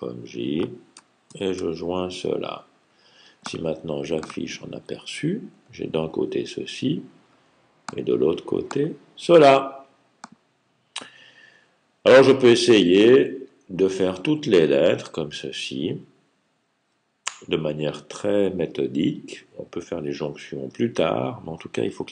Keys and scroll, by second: 1.1 super+j.